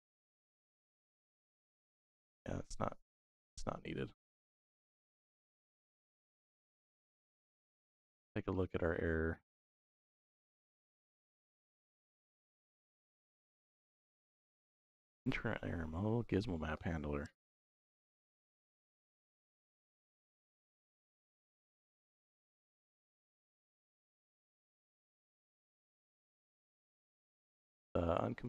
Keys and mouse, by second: 3.0-5.1 drag, 7.5 click, 13.1 click, 17.8 right click, 22.7 click, 25.0 click, 26.0 click.